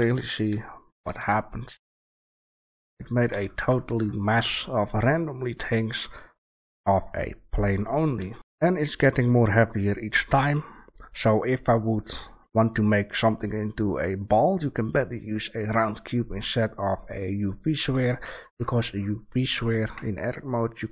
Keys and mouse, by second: 1.0 a, 1.3 drag, 4.4-5.3 middle drag, 5.4-7.3 middle drag, 8.0 right click, 8.3 Delete, 8.3 shift+a, 18.1-19.2 middle drag, 19.2-19.8 drag, 19.8 Tab.